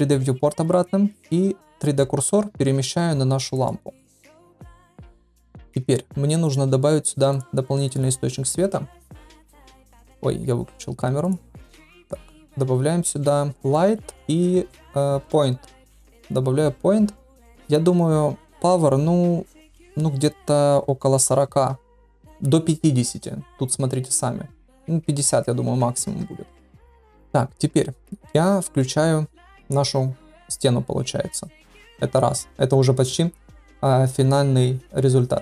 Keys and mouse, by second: 1.7 click, 2.8 shift+s, 4.1 middle click, 4.4 shift+drag, 7.3 click, 7.8 click, 10.8-12.1 drag, 12.3 shift+a, 18.4-27.1 drag, 28.7 click.